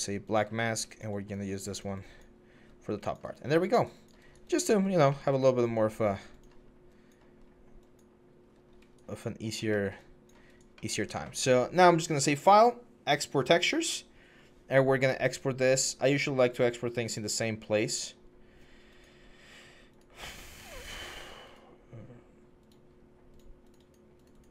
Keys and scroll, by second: 0.3 4, 2.4 1, 7.1 4, 8.3 1.